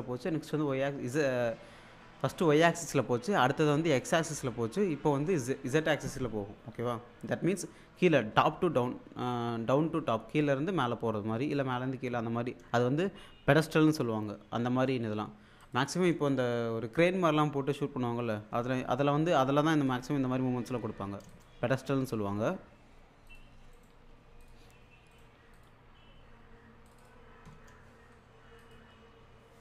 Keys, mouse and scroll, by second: 15.6 click, 21.3 click, 23.3 click, 23.7 right click, 24.4 click, 25.1 right click, 25.5 click, 26.9 click, 28.6 click.